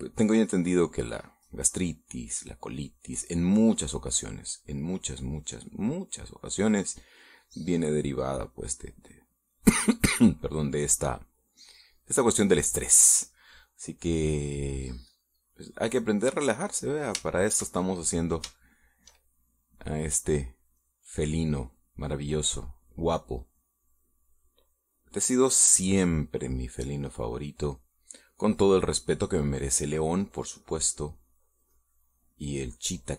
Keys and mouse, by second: 1.8 middle click, 2.9-4.6 drag, 4.7 click, 5.8-7.0 drag, 7.7 middle click, 8.4-9.6 drag, 12.0 click, 12.9 click, 14.6-16.6 drag, 16.6 click, 17.6-20.0 middle drag, 21.7-22.8 middle drag, 24.4 click, 25.6 click, 26.6 click, 27.2 middle click, 28.1 middle click, 28.8 middle click, 30.1 middle click, 30.8 click, 31.3-33.0 drag.